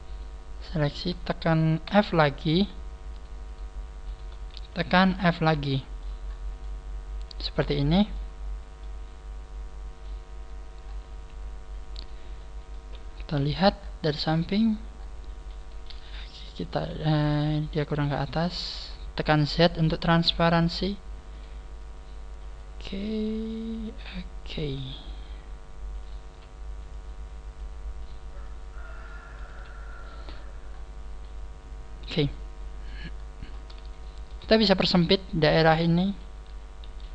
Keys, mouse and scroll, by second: 0.1 shift+right click, 0.3 shift+right click, 0.7 shift+right click, 1.8 f, 2.5 shift+right click, 3.1 shift+right click, 3.5 shift+right click, 4.4 shift+right click, 4.9 f, 5.3 middle click, 6.2-6.7 scroll down 3, 6.5 middle click, 7.0 shift+right click, 8.0 middle click, 8.3 scroll down 4, 8.7 middle click, 10.4-10.9 scroll up 6, 12.3 scroll up 1, 12.3 middle click, 13.3 KP_3, 13.7 scroll down 2, 14.3 scroll down 2, 14.9 scroll up 2, 15.8 right click, 16.1 shift+middle click, 17.1 shift+middle click, 17.1 z, 17.8 click, 19.3 right click, 19.7 click, 21.8 click, 23.3 right click, 23.8 click, 24.6 z, 26.0 right click, 26.2 z, 26.9 click, 27.9 right click, 28.4 click, 29.5 z, 30.4-30.8 scroll down 6, 31.5-32.3 scroll down 1, 32.3 middle click, 33.1-33.8 scroll up 6, 33.9 shift+middle click, 34.8 right click, 36.9 scroll down 2, 36.9 a.